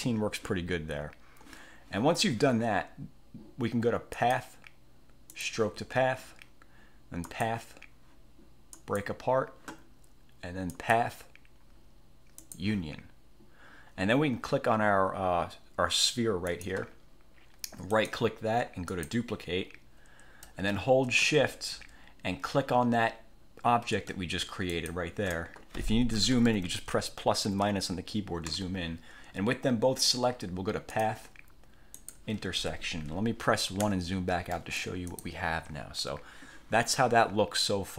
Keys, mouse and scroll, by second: 4.3 click, 5.4 click, 7.4 click, 8.9 click, 10.9 click, 12.5 click, 16.7 click, 18.1 click, 19.1 click, 21.6 ctrl+shift+scroll up 3, 24.9 shift+click, 26.3 -, 26.8 =, 27.6 =, 31.1 click, 32.1 click, 33.9 1, 34.7 click.